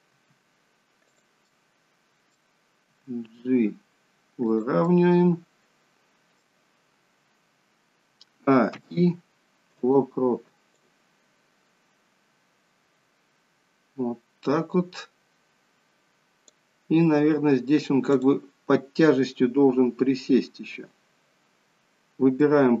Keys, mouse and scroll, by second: 0.1 r, 1.4 middle click, 2.7 g, 4.8 middle click, 8.2 a, 8.6 i, 10.7 click, 12.1 click, 18.0 click, 22.2 middle click.